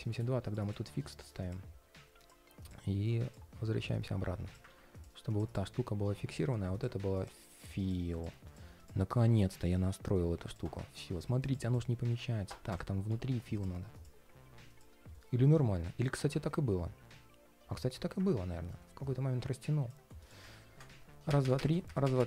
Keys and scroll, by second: 4.4 super+z, 15.3 ctrl+shift+4.